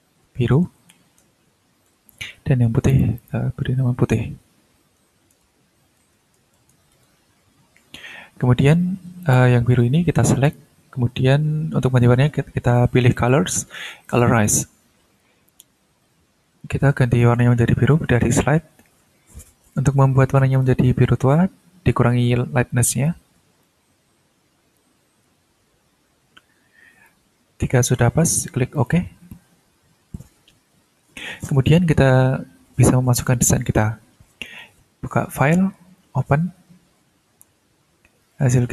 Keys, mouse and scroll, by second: 0.3-1.4 typing, 1.9 Return, 2.9 click, 5.0-7.2 typing, 9.2 click, 10.4 click, 13.1 click, 14.0 click, 17.2-19.5 drag, 20.5-23.3 drag, 23.6-27.2 drag, 28.7 click, 34.4 click, 36.0 click, 38.2 click.